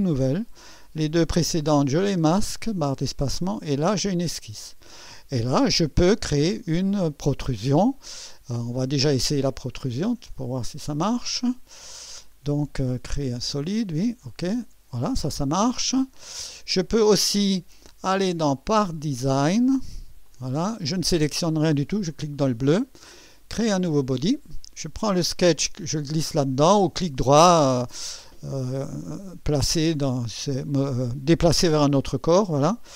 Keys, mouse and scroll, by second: 2.2 space, 3.5 click, 9.5 click, 10.3 click, 11.8 click, 14.3 click, 16.1 click, 18.1 click, 18.8 click, 20.3 click, 22.1 click, 23.8 click, 25.1-26.8 drag, 30.2 right click.